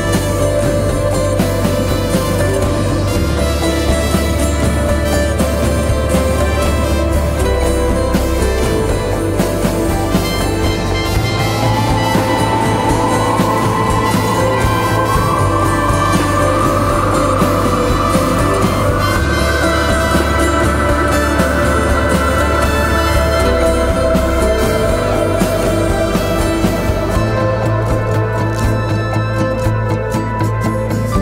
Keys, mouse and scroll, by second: 1.7 ctrl+z, 4.2 click, 5.6 shift+e, 6.1 t, 6.7 shift+t, 8.9 click, 15.3 click, 16.3 shift+click, 20.0-21.8 typing, 22.5 click, 30.7-31.2 shift+drag.